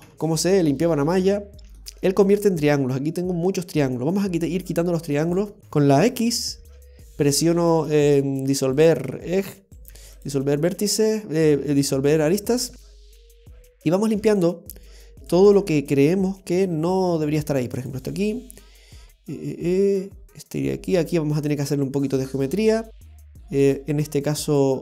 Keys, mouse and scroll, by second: 0.1 scroll up 1, 0.1 KP_7, 0.8 scroll down 1, 1.3 shift+middle click, 5.2 click, 5.6 right click, 5.6 x, 6.6 x, 9.7 right click, 9.9 x, 12.2 right click, 12.7 x, 14.0 right click, 14.1 x, 15.3 x, 17.5 right click, 17.6 x, 23.7 right click, 23.8 x.